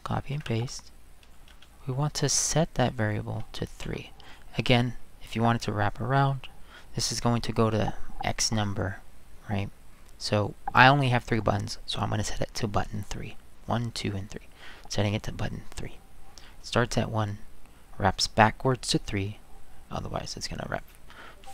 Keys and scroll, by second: 0.3 ctrl+v, 1.5 space, 3.8 3.